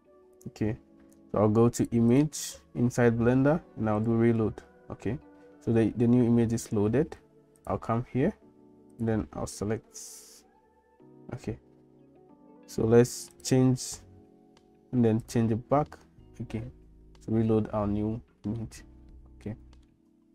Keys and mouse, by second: 1.8 click, 2.2-4.2 drag, 7.6-9.1 drag, 18.6 shift+middle click, 19.9 middle click.